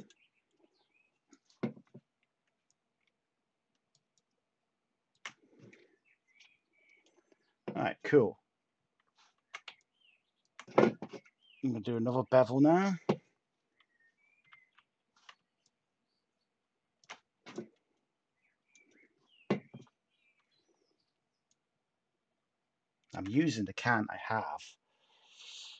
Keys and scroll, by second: 14.4 typing.